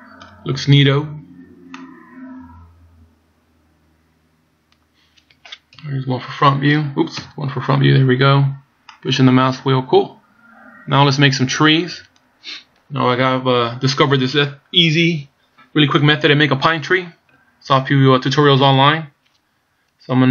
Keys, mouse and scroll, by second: 0.7 scroll up 2, 1.3 scroll down 2, 1.7 middle click, 5.7 KP_2, 7.2 KP_1, 8.0 scroll up 2, 8.9 middle click.